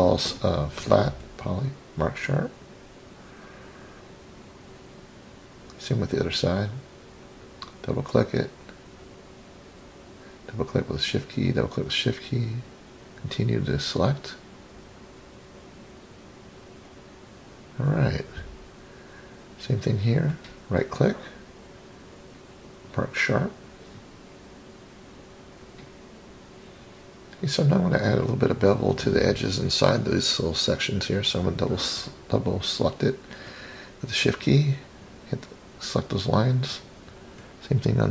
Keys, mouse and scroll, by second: 1.7 click, 2.3 middle click, 4.3 click, 5.4 scroll up 3, 6.8 click, 7.0 click, 7.9 shift+click, 8.8 shift+click, 9.0 shift+click, 10.1 shift+click, 10.3 shift+click, 11.5 shift+click, 12.4 scroll down 2, 13.7 shift+click, 14.0 shift+click, 15.4 shift+click, 15.7 shift+click, 16.3-17.0 scroll down 1, 17.0-17.6 scroll down 2, 19.7-21.5 right drag, 22.0-22.5 scroll down 2, 22.5 scroll up 4, 23.4 click, 24.7-26.2 middle drag, 26.2-26.9 scroll up 4, 27.1 click, 27.3 click, 28.0 scroll down 2, 28.8-29.4 scroll down 1, 29.4 scroll down 2, 30.2 shift+click, 30.5 shift+click, 31.0-32.0 middle drag, 32.3-32.8 scroll up 6, 33.3 shift+click, 33.5 shift+click, 34.0-34.6 scroll down 4, 34.5 middle click, 35.3 middle click, 36.2-36.9 scroll up 6, 37.2 middle click, 37.8-38.1 scroll up 1.